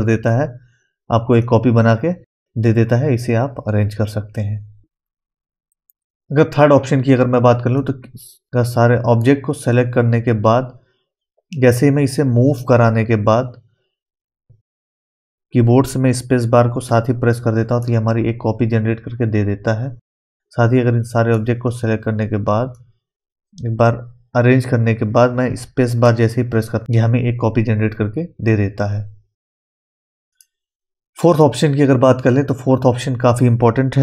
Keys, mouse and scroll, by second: 1.4-8.5 drag, 8.5 scroll down 1, 8.7 middle click, 9.7-11.0 scroll up 1, 11.7-17.4 drag, 11.7 typing, 16.8 space, 19.8 typing, 20.2-26.0 drag, 22.7 typing, 26.0 space, 30.3 click.